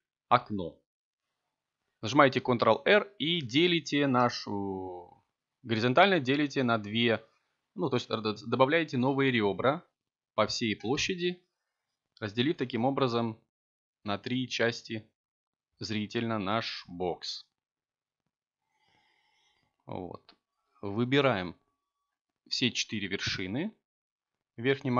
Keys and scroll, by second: 3.8 ctrl+t, 15.6 7, 19.3 s, 20.4 y, 22.4 3.